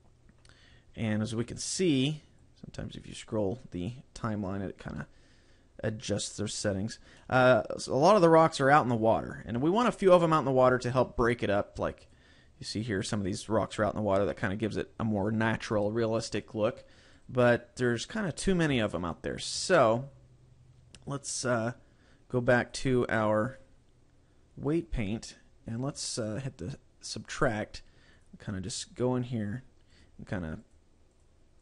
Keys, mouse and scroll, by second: 0.5-0.9 scroll down 3, 1.1 scroll up 2, 2.5 click, 5.1 middle click, 7.3 middle click, 9.7 KP_7, 10.6 scroll down 1, 10.9 shift+middle click, 19.0 shift+middle click, 21.5 click, 22.7 click, 23.6 click, 27.5 click, 28.3 click, 28.9 click, 29.5 click, 30.1 click, 30.9 click, 31.3 click.